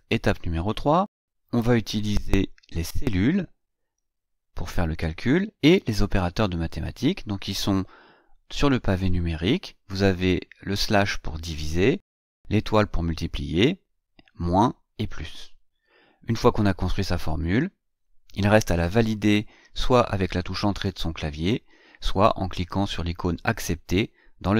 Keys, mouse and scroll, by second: 17.4 Right.